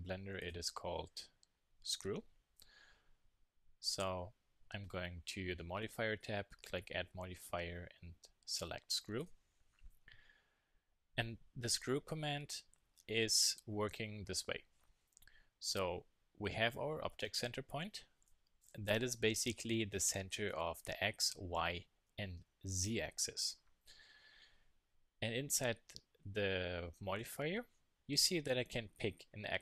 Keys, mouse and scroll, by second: 0.4-2.2 drag.